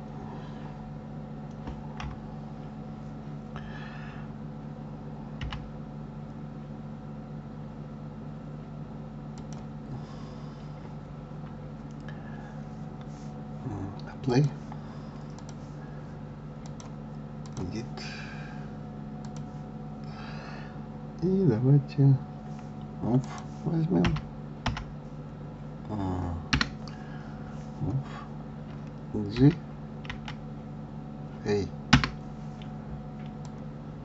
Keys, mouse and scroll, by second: 2.0 KP_3, 10.1-12.7 scroll up 1, 12.7-13.1 scroll up 1, 14.2-15.4 drag, 16.6-19.3 drag, 23.2 click, 24.0 g, 33.4-34.0 drag.